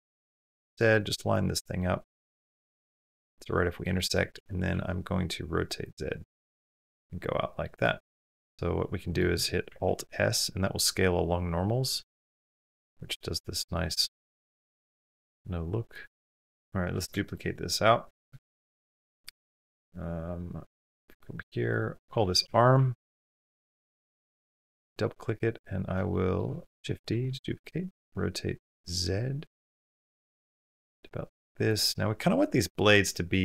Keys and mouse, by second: 0.0 g, 0.8 middle click, 1.7 middle click, 2.0 g, 3.3-3.9 middle drag, 4.6 r, 6.4-7.5 middle drag, 7.8-9.0 drag, 9.7 alt+s, 16.4-16.8 middle drag, 17.1 shift+middle click, 17.3-18.1 middle drag, 18.2 shift+middle drag, 18.6-19.6 middle drag, 25.9 drag, 26.6 shift+d, 27.4 middle click, 28.0 r, 33.3-33.4 middle drag.